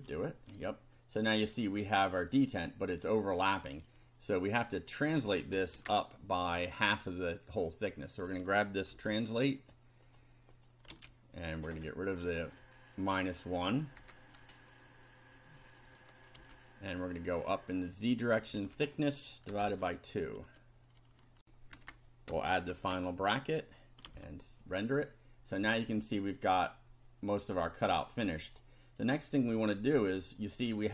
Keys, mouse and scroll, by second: 0.9 click, 2.6-4.0 drag, 4.9 click, 5.7 Return, 7.6 click, 8.9 ctrl+c, 9.5 click, 10.0 click, 10.3 middle click, 10.5 click, 10.8 ctrl+middle click, 10.9 ctrl+v, 11.8 click, 12.7 click, 14.0 0, 15.5 click, 16.3 ctrl+c, 17.9 click, 18.5 ctrl+v, 19.2-20.1 typing, 21.4 ctrl+r, 21.7 ctrl+Return, 22.3 ctrl+shift+Return, 22.7 shift+], 24.1 F5, 25.1-28.7 drag, 29.0 click.